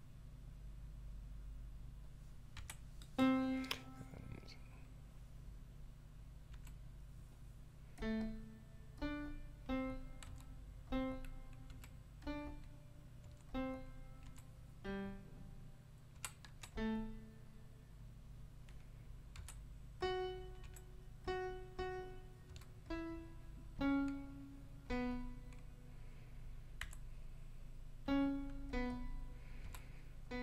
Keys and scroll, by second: 2.5 ., 6.5 4, 10.2 5, 11.7 4, 13.2 5, 14.2 4, 16.1 5, 16.4 ., 19.3 5, 20.6 4, 22.5 5, 26.8 4, 29.6 5.